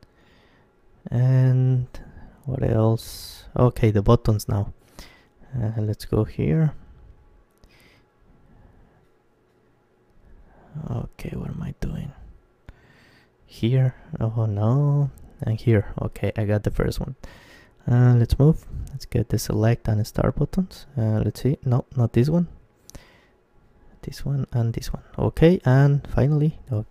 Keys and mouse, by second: 3.1-4.9 right drag, 3.8-4.9 drag, 4.9-7.1 middle drag, 7.1 z, 7.4 middle click, 8.6-11.5 right drag, 10.4-12.8 middle drag, 12.3-16.5 right drag, 16.0-20.5 middle drag, 20.5-22.3 right drag, 21.9 ctrl+z, 23.7-26.9 right drag, 26.3 ctrl+z.